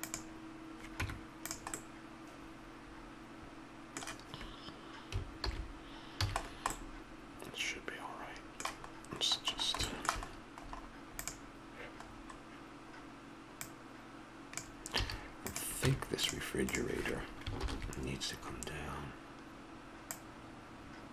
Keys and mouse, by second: 1.0 Tab, 5.4 alt+h, 6.2 a, 9.8-11.2 middle drag, 11.2-13.1 drag, 13.5-15.0 drag, 15.0 a, 15.4 click, 15.8 Tab, 16.6 click, 17.6 ctrl+l.